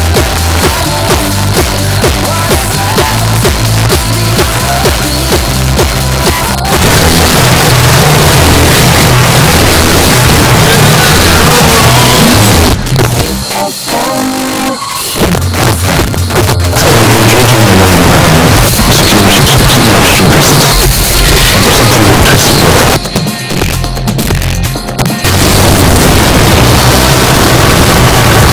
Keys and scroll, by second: 0.1 Down, 0.2 Down, 0.4 Down, 0.6 Down, 1.0 Down, 1.2 Return, 12.7 Page_Down, 22.8 Page_Down.